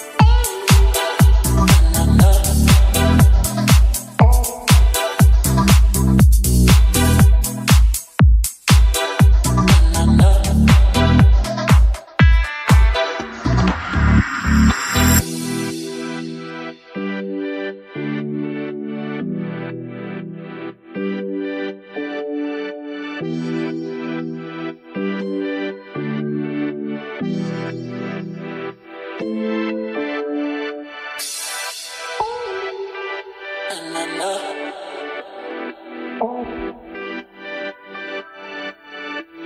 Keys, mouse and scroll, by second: 0.7 click, 1.3-2.4 middle drag, 2.7 g, 3.2 z, 6.1 click, 7.1 click, 8.0 KP_1, 9.7 click, 11.0 g, 11.3 z, 12.7 click, 13.2 click, 14.0 middle click, 14.4 click, 15.1 KP_1, 16.5-17.1 middle drag, 20.0 click, 21.4 click, 22.2-22.7 drag, 23.2 drag, 26.4-27.6 scroll down 1, 27.6-29.3 drag, 29.9-31.5 drag, 32.1 right click, 35.8-37.4 drag, 38.0-39.4 drag.